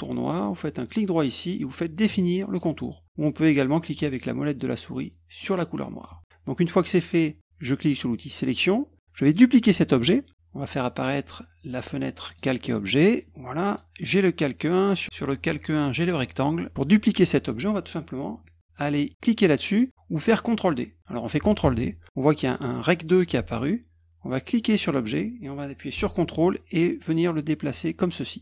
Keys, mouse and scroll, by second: 0.8 right click, 2.5 click, 5.4 middle click, 8.4 click, 11.7 click, 12.3 click, 13.2 click, 14.6 click, 15.4 click, 21.6 ctrl+d, 24.5-28.4 drag.